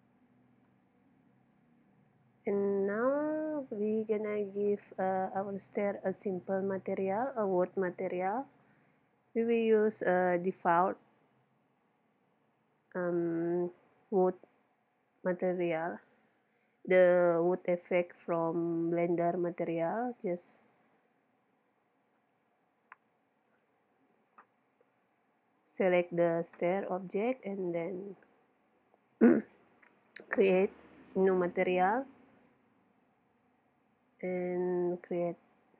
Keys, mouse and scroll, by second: 1.2-5.1 middle drag, 5.2-6.9 drag, 20.5-23.4 middle drag, 23.5-26.0 drag, 28.0-31.5 drag, 33.5-35.7 drag.